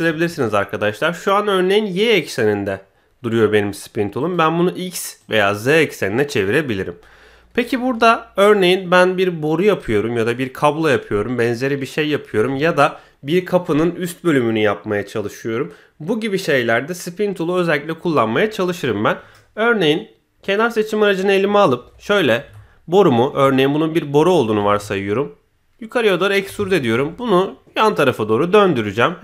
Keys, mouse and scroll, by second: 4.2 click, 5.2 click, 20.4 click, 21.8 KP_1, 22.3 e, 26.7 shift+middle click, 27.9-28.5 middle drag.